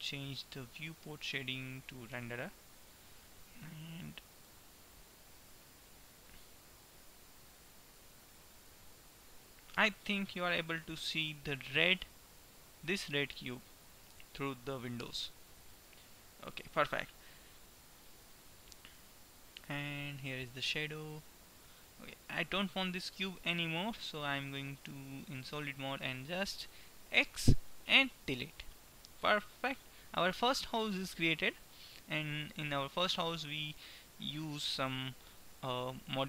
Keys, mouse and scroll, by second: 3.1-4.6 middle drag, 7.9-10.1 middle drag, 16.1-19.6 middle drag, 24.6-26.2 drag, 26.2-27.7 right drag, 27.2 x, 28.7-30.2 middle drag, 30.7-32.7 middle drag.